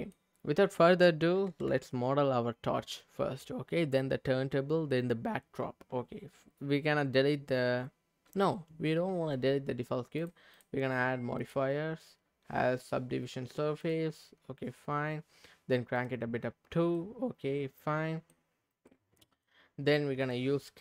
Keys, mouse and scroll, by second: 10.2 click, 10.5 click, 13.9 click, 14.4-15.9 scroll up 2, 15.9 click, 15.9 scroll up 1, 16.5-16.9 scroll up 1, 16.9-18.3 middle drag, 18.5-18.9 scroll down 1, 18.9 middle click.